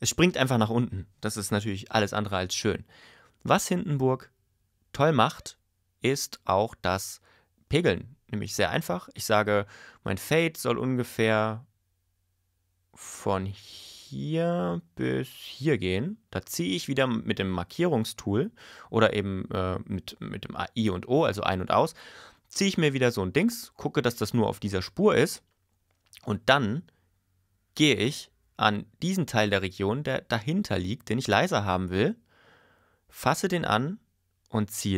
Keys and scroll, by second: 0.0 super+y, 1.8 super+y.